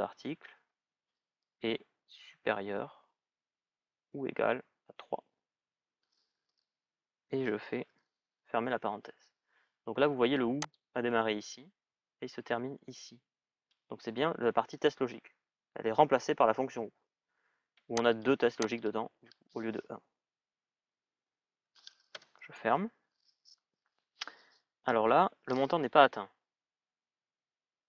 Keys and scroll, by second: 1.9 shift+<, 4.7 shift+", 21.9 Return.